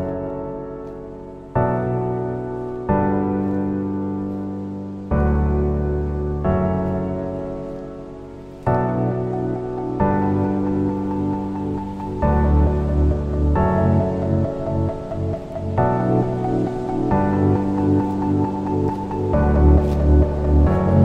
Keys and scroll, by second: 15.2 ctrl+alt+g.